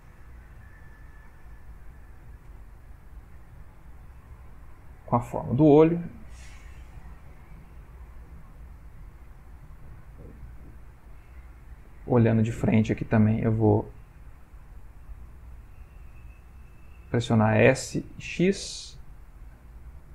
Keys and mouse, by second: 0.2 s, 2.0 g, 4.1 g, 5.9 r, 6.8 g, 8.1 middle click, 8.2 middle click, 10.7 click, 12.3 click, 14.6 click, 16.7 click, 18.0 s.